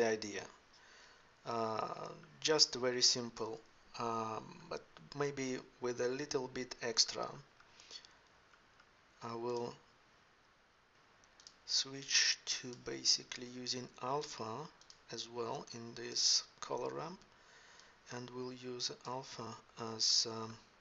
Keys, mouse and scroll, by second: 0.0 ctrl+Up.